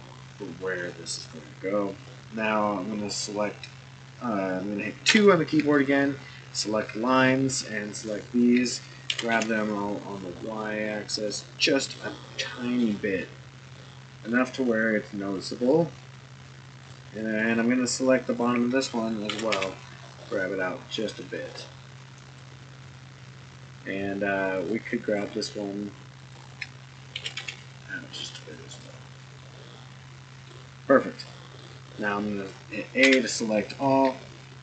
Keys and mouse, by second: 2.0 click, 5.1 2, 5.7 click, 7.1 shift+click, 8.0 shift+click, 9.1 g, 11.9-12.8 middle drag, 13.7 middle click, 16.7 click, 17.4 shift+click, 18.3 shift+click, 19.3 g, 24.5 click, 25.2 shift+click, 26.2 shift+click, 27.1 g, 29.4-30.5 middle drag, 31.3 middle drag, 33.0 a.